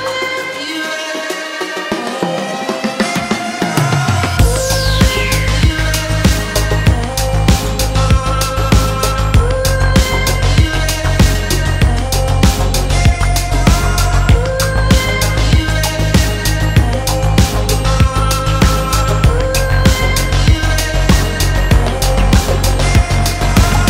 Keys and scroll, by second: 2.3-4.9 typing, 19.9-21.4 typing, 21.6 Return.